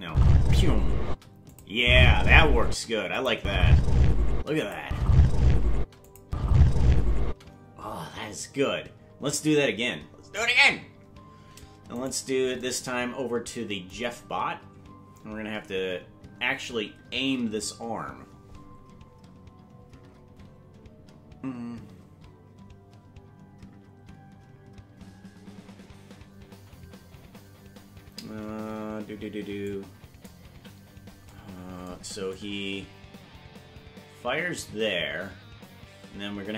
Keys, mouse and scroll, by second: 0.0-3.3 typing, 1.5 click, 3.1 click, 4.4 space, 4.6 click, 4.8 space, 5.8 space, 6.0 click, 6.2 space, 7.2 space, 10.4 right click, 12.0 right click, 14.4-15.6 scroll up 1, 15.9 scroll up 4, 29.6 click, 30.5 KP_Decimal, 32.3-36.5 drag.